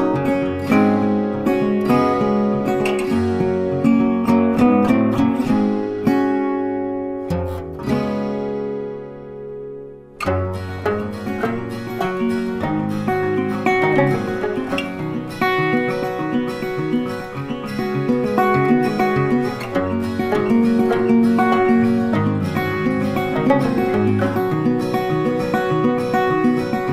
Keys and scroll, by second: 3.5 ctrl+c, 3.6 ctrl+f, 6.4 ctrl+8, 10.7 ctrl+z, 14.3 ctrl+z, 19.8 ctrl+z.